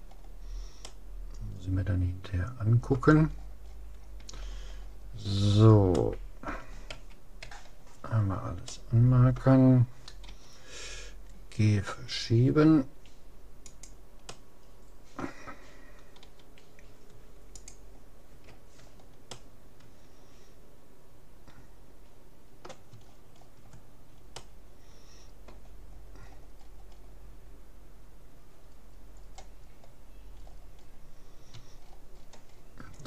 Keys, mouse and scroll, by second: 3.4-3.7 scroll up 1, 5.2 middle click, 6.0-7.6 middle drag, 7.0 a, 7.4 a, 8.8-10.2 middle drag, 10.4 g, 14.4-15.4 middle drag, 15.4 click, 16.2 g, 18.4 a, 18.8-21.4 middle drag, 23.0-26.0 middle drag, 26.2-30.4 middle drag, 31.8-32.5 scroll down 1, 32.5-33.0 middle drag.